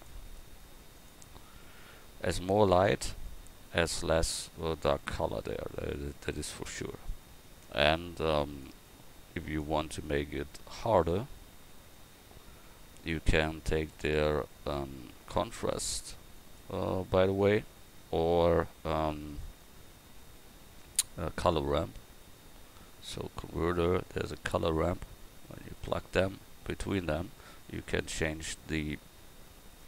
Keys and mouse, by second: 0.0-2.8 drag, 8.6-10.9 drag, 11.7-17.3 drag, 17.7 click.